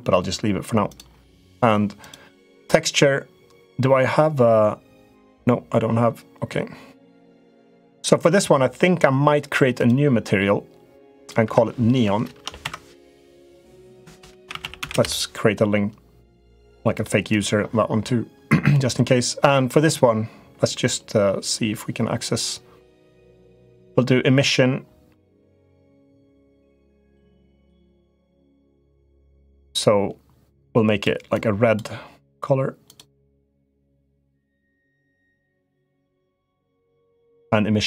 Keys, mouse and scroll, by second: 0.6 click, 1.9-7.7 drag, 9.6 click, 10.9 click, 11.2 F2, 13.3-15.5 drag, 16.1 click, 16.8-26.6 drag, 27.0 click, 32.6 click, 33.7 click, 36.3 click, 37.2-37.8 drag.